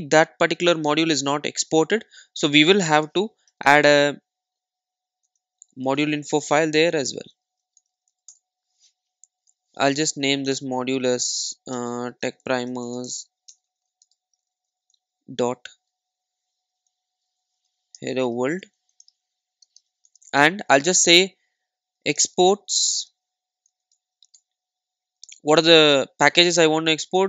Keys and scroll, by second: 3.5 super+n, 10.6 Return, 24.4 Return.